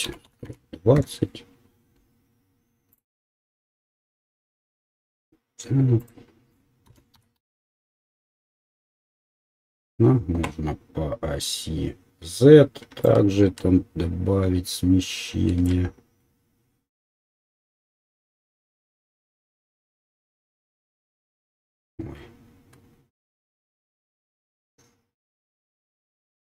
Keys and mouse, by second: 4.3-26.5 drag.